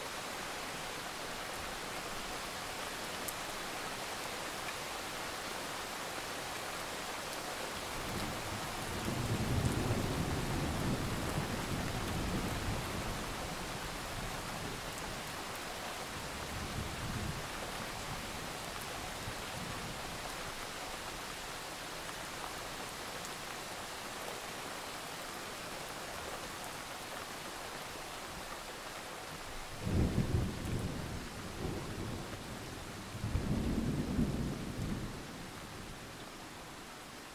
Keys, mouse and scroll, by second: 0.0-0.4 alt+scroll down 2, 0.4 click, 2.3 alt+scroll up 1, 2.8 alt+click, 4.3 shift+click, 4.4 right click, 5.3 click, 5.7 alt+scroll down 1, 5.8-6.7 scroll up 1, 6.8-7.2 ctrl+scroll up 2, 8.5-8.9 ctrl+scroll down 1, 8.9 click, 9.1 scroll up 1, 9.3 alt+scroll down 1, 9.5-9.9 scroll up 2, 10.4 alt+scroll up 1, 11.1-11.8 alt+scroll up 1, 11.8 alt+scroll down 1, 12.1 click, 12.4-13.0 alt+scroll down 1, 13.0 click, 13.3-14.0 alt+scroll up 2, 14.0 click, 15.7 alt+scroll down 1, 16.0 alt+scroll up 1, 16.4 click, 17.4-18.3 alt+scroll down 2, 17.7 click, 18.3-18.7 scroll up 1, 19.0-19.4 scroll down 1, 20.2 click, 20.4-21.4 alt+scroll up 1, 21.4 click, 23.8-24.2 alt+scroll up 1, 24.2 click, 24.7-25.3 scroll up 1, 25.3 click, 26.8 alt+scroll down 1, 27.0-27.4 scroll up 1, 27.4 click, 27.6 scroll up 1, 28.9 click, 29.2 shift+click, 29.4 right click, 30.3 click, 30.6-30.9 ctrl+scroll down 1, 30.9 alt+click, 31.7 right click, 32.6 click, 32.7 ctrl+scroll down 1, 32.9-35.5 drag, 35.6 shift+click, 35.9 right click.